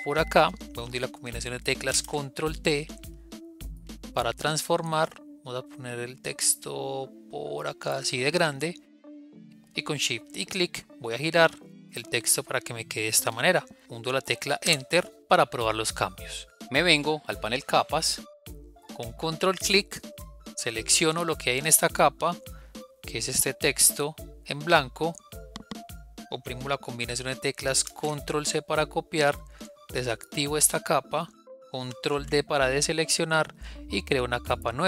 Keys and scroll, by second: 1.9 ctrl+t, 27.8 ctrl+c, 31.7 ctrl+d.